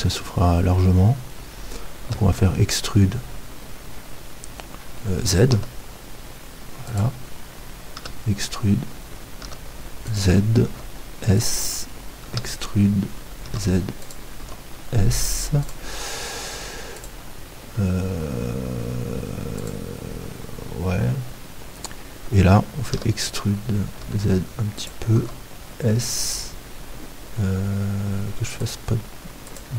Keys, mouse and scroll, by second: 2.0-5.5 middle drag, 2.0 e, 7.0-13.9 drag, 8.0 e, 10.7 s, 12.3 e, 14.4 s, 15.7-17.1 drag, 23.0-25.2 middle drag, 23.0 e, 25.2 s, 26.3-28.8 drag.